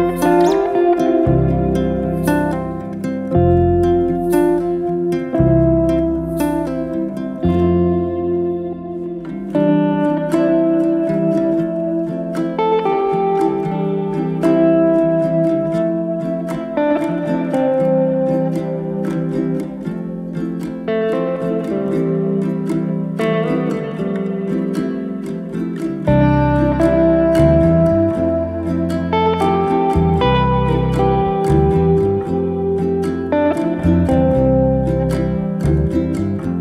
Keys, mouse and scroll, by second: 0.1-1.9 shift+middle drag, 1.9 alt+d, 4.7 s, 7.6 g, 9.4 alt+d, 11.7 s, 13.3 g, 14.9 scroll down 1, 15.1-16.7 middle drag, 18.2 click, 19.6 g, 22.2 click, 22.7 g, 24.3 click, 24.7 g, 26.4-27.7 middle drag, 27.7-28.1 scroll up 2, 28.1 click, 28.4-28.9 right drag, 28.9 click, 29.2-30.7 right drag, 30.7 click, 31.7 drag, 32.3 click, 32.7 click, 33.2 click, 33.7-34.6 middle drag, 34.6-35.5 scroll up 1, 35.5 click.